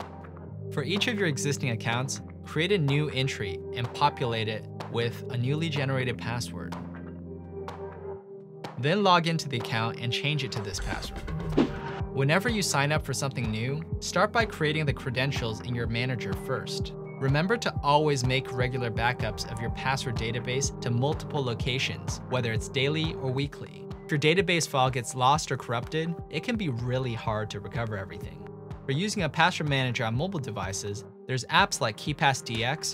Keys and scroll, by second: 0.1-1.9 typing, 4.8-6.6 typing.